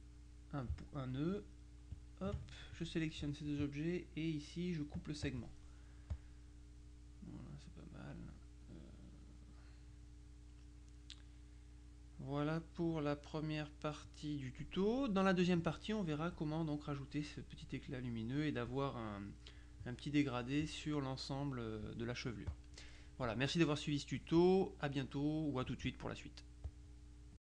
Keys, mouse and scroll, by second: 2.0 ctrl+alt+click, 2.8 ctrl+alt+click, 5.0 click, 6.2 click, 7.9 middle click, 8.9-12.0 middle drag, 12.2-14.7 middle drag, 22.6 click, 26.8 click, 27.4 click.